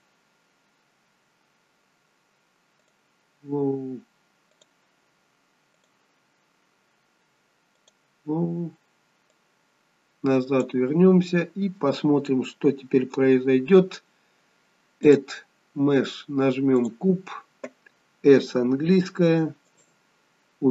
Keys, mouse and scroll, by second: 0.5-1.4 scroll down 6, 1.9-3.0 scroll down 2, 3.0 click, 5.9 click, 9.4 click, 15.1 click, 18.6 s, 20.1-20.7 scroll down 1.